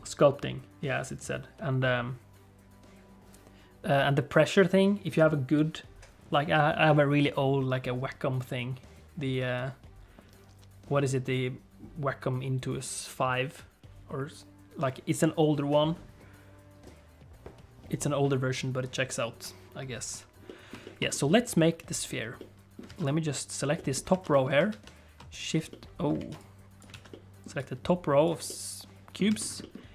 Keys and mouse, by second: 20.4 shift+middle click, 22.4 middle click, 22.8 alt+z, 23.1 click, 23.7 middle click, 24.1 alt+z, 24.3 middle click, 24.7 shift+a, 25.7 middle click, 26.1 alt+z, 26.4 click, 26.9 alt+a, 27.1 click, 27.7 click, 28.4 click, 29.2 alt+z, 29.6 click.